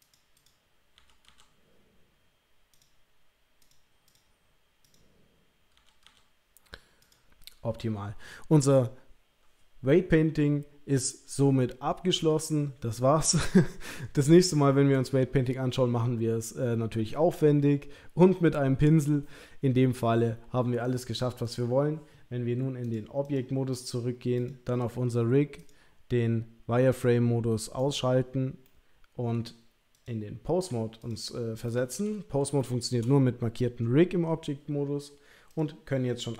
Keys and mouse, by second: 0.0 click, 0.3 click, 1.0 l, 1.3 l, 2.7 click, 3.7 click, 4.8 click, 5.7 l, 6.0 l, 7.0 drag, 7.3 g, 21.4 click, 22.9-23.5 drag, 23.7 click, 24.3 click, 27.8 click, 28.6-29.3 middle drag, 30.1-31.1 drag, 31.6-32.4 middle drag, 32.6-33.0 shift+middle drag, 35.5 click.